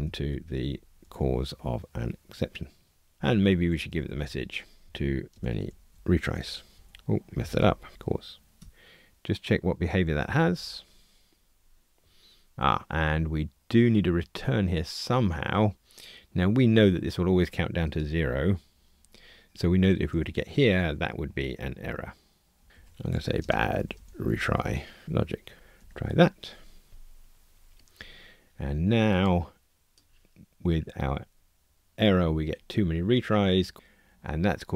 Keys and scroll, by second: 2.2 Return, 6.7 alt+shift+Right, 8.6 Tab, 8.6 alt+Return, 10.5 ctrl+r, 25.7 ctrl+r.